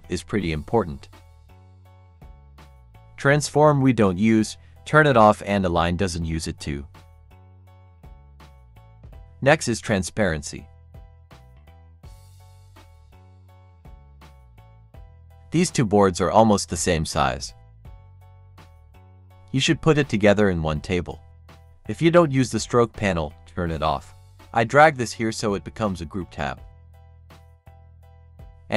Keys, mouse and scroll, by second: 3.2 right click, 4.5 click, 5.5 right click, 7.0 click, 13.2-21.5 drag, 21.5 right click, 22.7-27.9 drag, 27.9-28.7 drag.